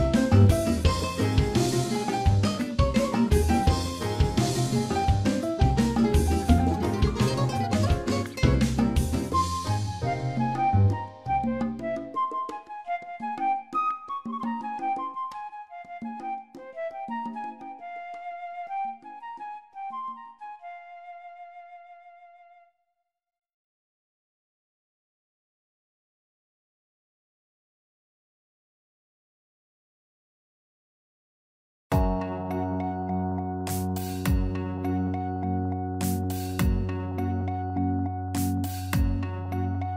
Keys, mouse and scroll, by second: 2.0 click, 3.2 click, 6.0 click, 6.6 click, 8.7 middle click, 9.6 shift+middle click, 10.3-11.1 scroll down 3, 10.7 shift+middle click, 11.2 middle click, 12.8 KP_Divide, 13.5-13.9 scroll down 3, 13.9 middle click, 15.0 scroll up 3, 15.4 middle click, 17.1 click, 21.0 click, 22.4 middle click, 23.7 click, 24.7 middle click, 25.9 scroll down 2, 26.2 click, 26.5 middle click, 27.5 shift+middle click, 31.4 middle click, 33.9 scroll up 3, 34.5 click, 34.8 Tab, 35.3 shift+middle click, 35.8 Tab, 35.9 click, 36.1 Tab, 36.7 click, 39.3 middle click.